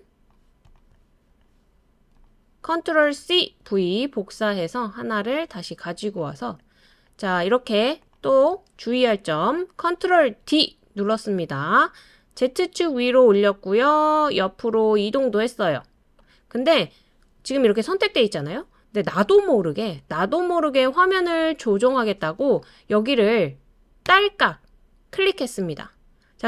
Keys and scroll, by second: 3.2 super+c, 3.6 super+v, 10.4 super+d.